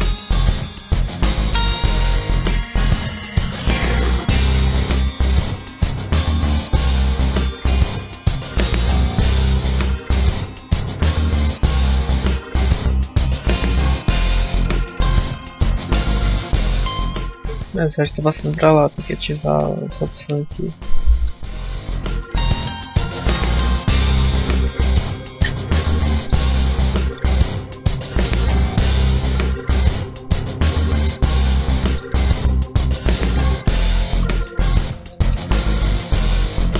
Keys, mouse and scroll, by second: 0.4 alt+right click, 0.8 x, 1.4 alt+right click, 1.7 x, 2.8 alt+right click, 3.4 alt+right click, 3.8 x, 4.6 shift+middle click, 6.0 alt+right click, 6.5 x, 7.4 alt+right click, 7.8 x, 8.8 alt+right click, 9.3 alt+right click, 9.7 x, 10.8 alt+right click, 11.7 alt+right click, 12.1 x, 12.6 a, 12.9 shift+middle click, 13.1-13.4 scroll up 4, 13.4 middle click, 14.0 right click, 15.0 click, 19.0 shift+middle click, 24.8 click, 25.9 middle click, 26.3 scroll up 1, 26.7 middle click, 28.3 click, 29.3 right click, 29.9 click, 30.5 a, 30.7 middle click, 32.1 right click, 32.5 z, 32.8 shift+right click, 33.5 click, 34.0 z, 34.3 middle click, 34.7 scroll down 2, 34.9 shift+middle click, 35.4 scroll down 2, 35.6 middle click, 36.2 scroll up 1, 36.3 middle click.